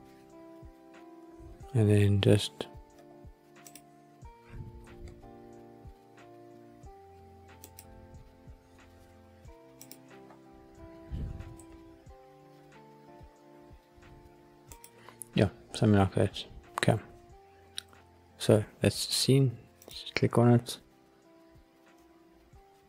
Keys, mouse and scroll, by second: 3.0-3.6 scroll down 1, 3.6 click, 3.6 scroll down 1, 4.8 g, 7.6 click, 9.8 click, 10.2-10.6 scroll up 3, 11.5 g, 14.7-15.4 drag, 15.4-16.6 scroll down 5, 16.6-17.7 scroll up 1, 21.1 click.